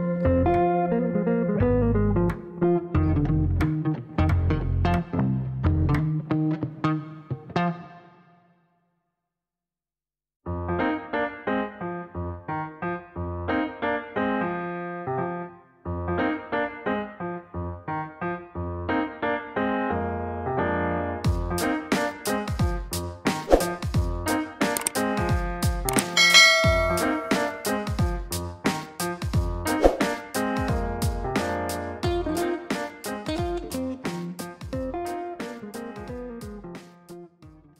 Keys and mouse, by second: 5.4 KP_3, 5.6 KP_0, 5.7 KP_0, 6.0 KP_Enter, 7.9 middle click, 8.8 click, 11.3 click, 11.6 space, 12.4 click, 13.0 middle click, 14.9 middle click, 15.8 middle click, 16.8 middle click, 17.7 middle click, 19.0 middle click, 20.8 click, 24.5 click, 25.7 click, 27.0 KP_1, 27.1 KP_5, 27.4 KP_Enter, 30.5 click, 31.2 right click, 34.1 right click, 35.2 middle click, 35.8 right click.